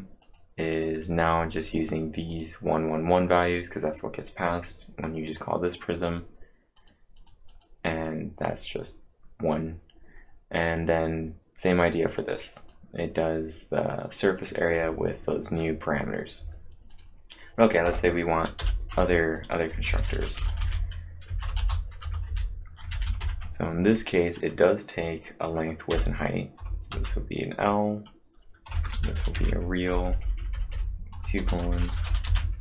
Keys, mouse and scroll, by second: 0.2 click, 2.3 click, 5.3-7.8 click, 7.6-8.3 typing, 11.4-12.2 typing, 11.7 click, 12.6 click, 16.7-17.4 typing, 16.9 click, 18.6-21.6 typing, 18.9 Return, 23.2 shift+9, 25.9 l, 26.9 shift+;, 28.5-30.0 typing, 31.2-32.6 typing.